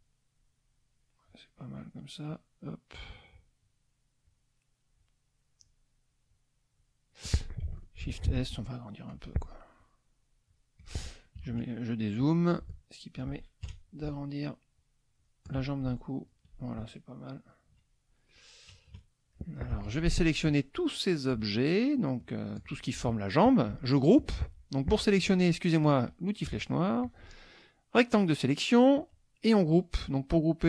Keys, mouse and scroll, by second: 1.3 click, 2.3 click, 2.6 click, 3.3 click, 4.3 click, 5.0 click, 5.6 click, 6.2 click, 6.7 click, 7.1 click, 8.0 shift+s, 8.6 shift+click, 9.7 shift+click, 10.4 shift+click, 11.4 KP_Subtract, 12.0 click, 13.6 shift+KP_Subtract, 15.2 shift+click, 16.2 shift+click, 17.7 KP_Subtract, 18.7 KP_Add, 19.4 click, 19.7 F1, 20.4-21.8 drag, 25.0 click, 27.0-28.5 drag.